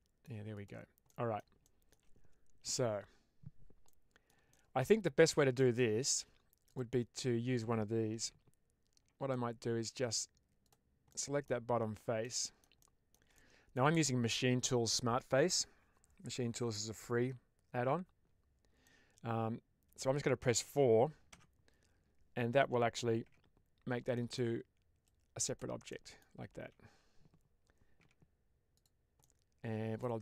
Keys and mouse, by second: 0.4 click, 0.9 middle click, 1.5-1.9 shift+middle drag, 3.7 middle click, 4.4-4.7 shift+middle drag, 5.0 middle click, 5.7 shift+middle click, 8.1 Tab, 9.2 middle click, 10.5 click, 11.0 middle click, 12.1 middle click, 12.7 shift+middle click, 13.2 middle click, 18.7-19.9 middle drag, 21.3 4, 23.1 Tab, 24.0 middle click, 24.9 click, 25.8 middle click, 26.6 ctrl+z, 27.9 Tab, 29.1 middle click.